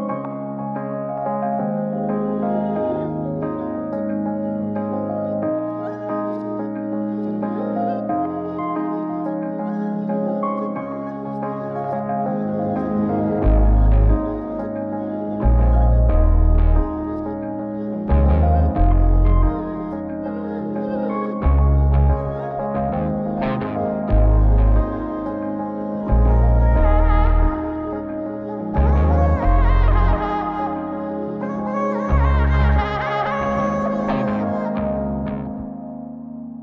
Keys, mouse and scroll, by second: 0.5-2.9 drag, 15.4-16.2 middle drag, 17.5 click, 18.5 shift+q, 25.3 shift+q, 27.1 shift+q, 31.2 shift+q, 33.8 shift+q, 35.1 click, 36.0 click.